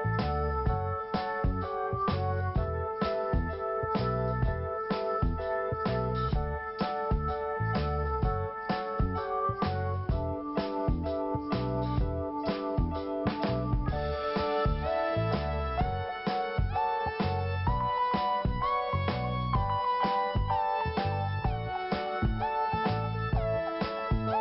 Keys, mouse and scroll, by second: 1.2 click, 2.0 click, 3.1 scroll down 1, 4.8 scroll up 1, 7.4 right click, 8.5 click, 9.8 click, 10.0 click, 10.7 scroll down 1, 11.7 click, 13.7 scroll up 1, 14.6 click, 17.8 ctrl+t, 18.7-19.3 scroll up 1, 23.1 click.